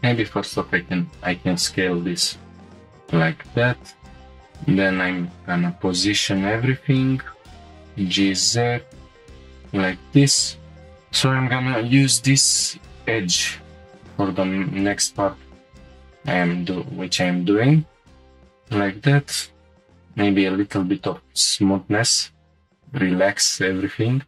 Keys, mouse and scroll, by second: 1.7 click, 2.6 click, 2.6 s, 3.1 g, 3.8 x, 5.0 click, 7.6 g, 7.6 z, 9.4 click, 10.2 shift+click, 10.7 g, 12.0 g, 13.7 click, 13.8 g, 14.8 click, 15.4 click, 15.8 g, 16.4-17.4 drag, 17.4 g, 18.2 click, 18.6 middle click, 18.6-19.0 scroll up 2, 19.7 ctrl+click, 19.7 right click, 19.7 2, 20.7 ctrl+click, 21.1 right click, 23.0 scroll down 1.